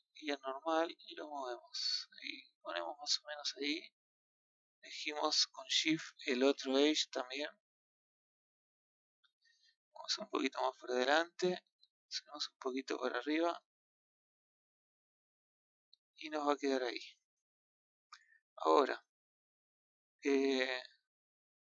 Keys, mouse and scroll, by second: 4.0-5.8 middle drag, 5.8 shift+click, 8.1 KP_2, 10.2 click, 12.8 click, 14.0-17.0 middle drag, 19.8-21.2 scroll down 1, 21.2 scroll up 1.